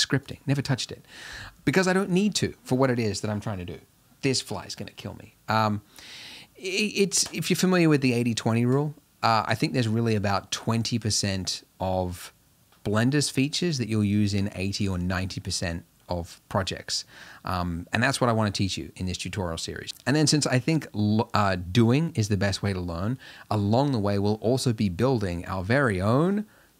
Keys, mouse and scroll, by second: 0.3 click.